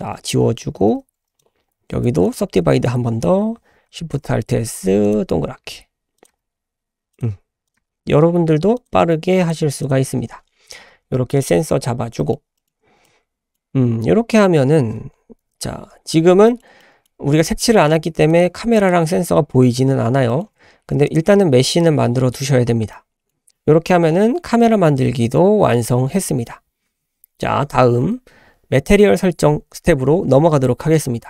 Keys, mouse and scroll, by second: 0.1 ctrl+c, 0.9 ctrl+x, 1.4-2.0 drag, 2.2-2.6 right drag, 4.1 alt+shift+s, 5.6 s, 6.3 g, 7.3 s, 7.8 g, 9.0 s, 9.5 g, 10.4-11.0 scroll down 3, 11.0 Tab, 11.7-12.0 scroll down 2, 12.2 shift+middle click, 12.6 shift+middle click, 13.0 scroll down 1, 13.0-13.6 middle drag, 13.6 scroll down 1, 13.8-14.2 scroll up 1, 15.4 /, 16.4 shift+middle drag, 16.8 middle click, 17.1-18.3 scroll up 4, 18.3 click, 18.8-19.1 drag, 19.1 Tab, 19.9-20.3 scroll down 2, 20.3 shift+middle click, 21.0 click, 22.9-23.4 shift+middle drag.